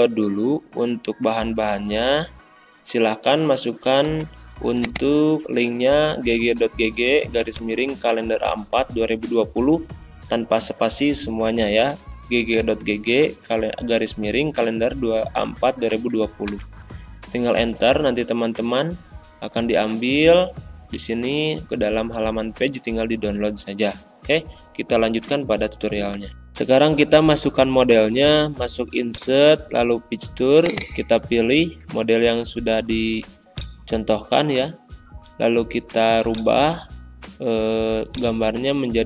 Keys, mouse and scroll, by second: 31.2 click, 33.4 click.